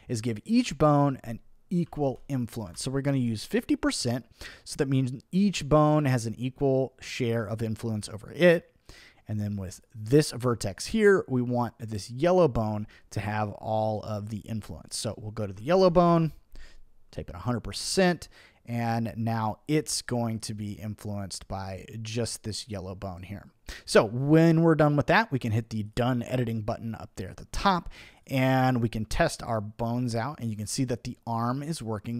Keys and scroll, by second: 1.6-2.6 typing, 2.7 Return, 15.5 1, 15.7 0, 16.1 Return.